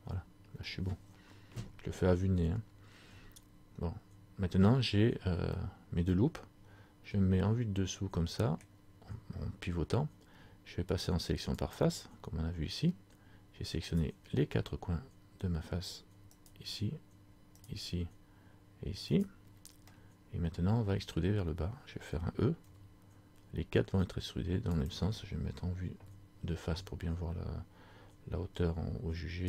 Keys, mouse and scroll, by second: 3.2-4.1 scroll down 4, 4.1-5.3 scroll down 2, 5.7 middle click, 8.8 scroll down 1, 11.6 click, 14.1 right click, 16.5 shift+right click, 19.9 scroll up 1, 20.1 middle click, 22.8 e, 26.0 KP_1.